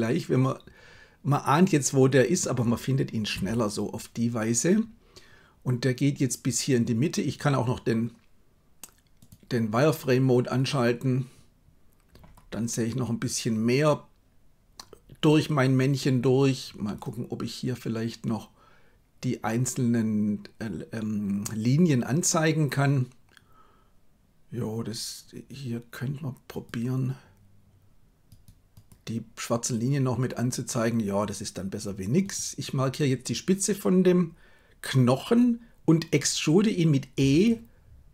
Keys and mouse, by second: 3.3 KP_3, 7.2 click, 9.1 click, 17.0-29.2 drag, 37.1 e.